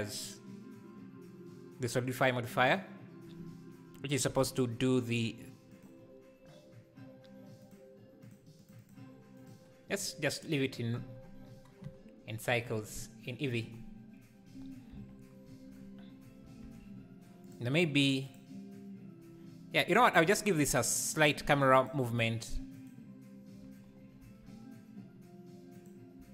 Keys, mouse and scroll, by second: 5.8 click, 7.8 click, 8.3 click, 8.9-17.7 drag, 18.0 Left, 18.5 Left, 21.6 g, 22.9-24.3 shift+right drag, 24.3 g.